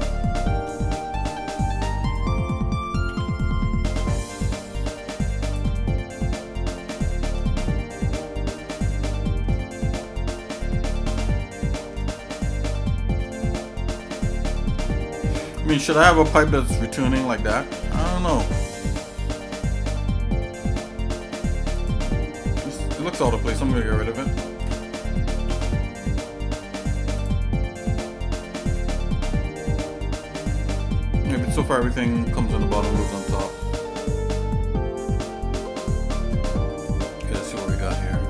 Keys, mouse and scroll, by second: 0.8 middle click, 3.1 e, 5.9 shift+middle click, 6.9 shift+middle click, 7.5 middle click, 7.7-8.1 scroll down 3, 8.2 scroll up 1, 8.2 middle click, 8.7 shift+middle click, 9.6 middle click, 10.2-10.7 scroll up 3, 10.9 middle click, 11.6 shift+middle click, 12.2 middle click, 12.6 shift+middle click, 13.4 middle click, 14.1 middle click, 15.5 shift+middle click, 20.0 shift+middle click, 20.9 middle click, 21.7 click, 23.7 l, 25.3 x, 27.8 middle click, 28.4 shift+middle click, 29.3 scroll down 1, 29.7 middle click, 30.2 shift+middle click, 30.8 middle click, 32.6 middle click, 33.3-36.1 shift+middle drag, 36.8 scroll up 2, 37.5-38.2 drag.